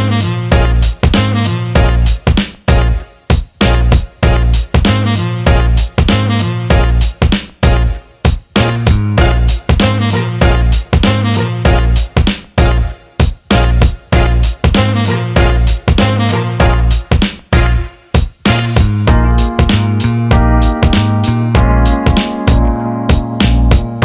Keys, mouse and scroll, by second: 2.2-3.5 drag, 3.7 alt+middle click, 4.1 alt+shift+middle click, 4.4-5.6 alt+middle drag, 6.7 alt+middle click, 8.6 alt+middle click, 9.4-10.4 drag, 10.6 alt+middle click, 11.3 click, 11.6 alt+middle click, 12.0 alt+shift+middle click, 13.5 click, 14.2 alt+middle click, 15.6 click, 15.8 alt+middle click, 16.7 click, 17.7 shift+click, 18.6 alt+middle click, 22.1-23.6 drag.